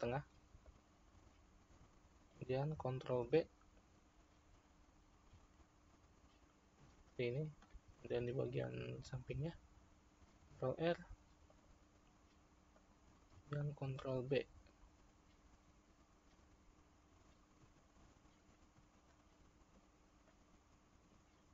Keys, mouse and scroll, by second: 3.2 ctrl+b, 8.0-10.4 middle drag, 10.4 ctrl+r, 14.2 ctrl+b, 20.2-21.5 middle drag.